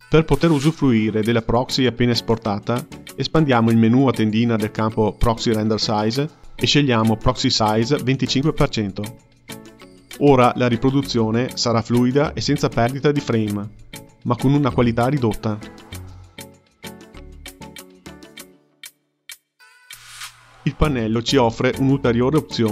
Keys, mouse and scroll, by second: 1.3 click, 8.2-11.4 drag, 13.4-14.0 drag, 14.0 space, 18.3 space, 20.2-21.7 scroll down 5, 21.7-22.4 scroll down 1, 22.4 scroll down 1.